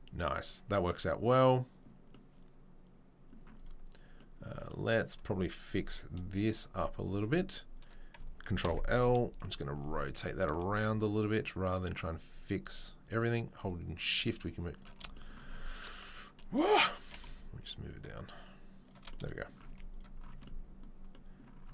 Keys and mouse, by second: 3.5 click, 3.6-7.1 middle drag, 4.5 Tab, 7.1 click, 7.2-21.7 middle drag, 8.7 ctrl+l, 9.0 KP_3, 10.5 r, 17.0 g, 19.6 z, 20.3 Tab.